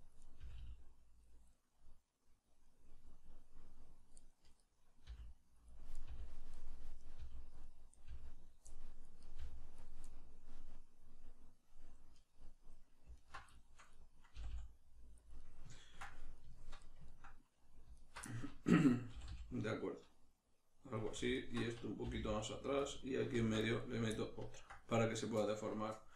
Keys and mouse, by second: 0.2 right click, 0.4 g, 1.3 click, 1.5-4.2 middle drag, 4.2 right click, 5.0 middle click, 5.0 g, 5.7 click, 5.9 right click, 6.0 g, 6.5 click, 7.0 right click, 7.2 g, 7.6 click, 7.9 right click, 8.0 g, 8.4 click, 8.7 middle click, 9.2 right click, 9.4 g, 9.8 click, 10.0-13.1 middle drag, 13.1 alt+right click, 13.5-15.3 shift+middle drag, 14.3 g, 15.3 click, 15.4-18.0 middle drag, 18.0 alt+right click, 18.3-21.0 middle drag, 19.1 g, 21.0 click, 21.3 alt+right click, 22.1 g, 22.9 click, 23.4 ctrl+r, 23.9 right click, 24.5-26.1 ctrl+middle drag.